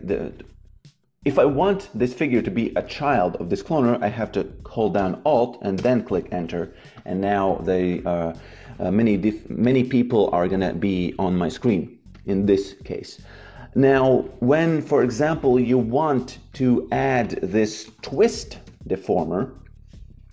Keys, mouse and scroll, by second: 2.7 shift+c, 5.7 alt+Return, 6.9 click, 12.0 click, 14.8 click, 15.9 Delete, 16.4 click, 17.7-19.1 typing.